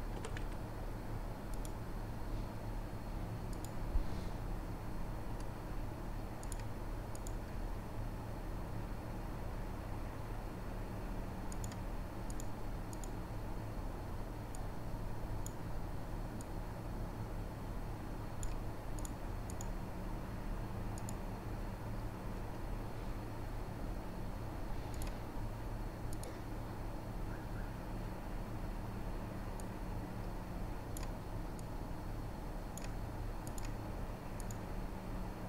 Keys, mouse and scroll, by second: 0.2 r, 3.6 click, 3.6 middle click, 6.4 click, 6.4 middle click, 7.2-11.6 drag, 7.2 middle click, 10.3-11.6 middle drag, 14.6-19.1 middle drag, 19.1 right click, 19.5 middle click, 19.6-24.9 right drag, 24.9 middle click, 25.0-26.2 right drag, 26.2-33.8 middle drag, 26.4-27.7 drag, 26.4-27.7 right drag, 28.2-30.0 drag, 28.2-30.0 right drag, 30.8-31.3 drag, 30.8-31.3 right drag, 31.6-33.6 drag, 31.6-35.4 right drag.